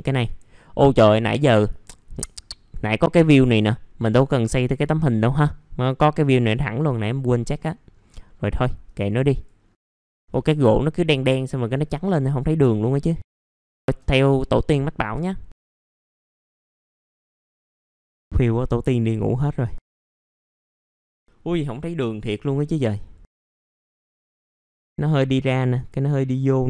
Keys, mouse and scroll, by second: 0.2 click, 0.7 middle click, 1.6 click, 3.1-4.8 scroll up 1, 4.8 middle click, 5.4 scroll down 1, 6.6 middle click, 7.7-8.2 scroll up 1, 8.2 middle click, 8.8 ctrl+right click, 9.3 click, 9.6-10.0 scroll down 1, 10.0 scroll up 1, 10.2 ctrl+right click, 11.1 click, 11.9-13.5 scroll up 1, 13.5 click, 13.8 shift+click, 14.2 middle click, 14.3 scroll down 1, 15.5-15.8 scroll up 1, 15.8 click, 16.9 scroll down 1, 17.0 middle click, 17.3 scroll up 1, 17.9 shift+click, 18.3 click, 19.9 scroll down 1, 19.9 middle click, 20.2-20.7 scroll up 1, 20.7 BackSpace, 20.8 scroll up 1, 21.1-21.5 scroll down 1, 22.3 scroll up 1, 23.3 click, 23.8 middle click, 23.9 scroll down 1, 24.3 shift+click, 24.4 middle click, 24.7-25.1 scroll up 1.